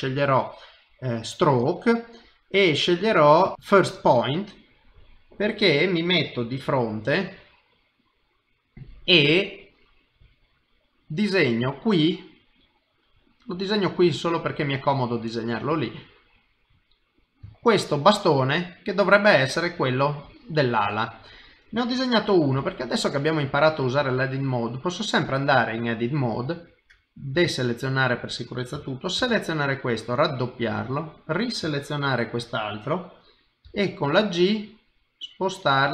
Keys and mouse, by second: 4.4 middle click, 6.6 KP_1, 12.7 click, 15.9 middle click, 17.5 shift+middle click, 18.0 middle click, 21.8 middle click, 22.6 KP_1, 24.0 ctrl+Tab, 27.3 alt+a, 27.7 click, 29.2 shift+d, 30.9 shift+click, 33.6 g.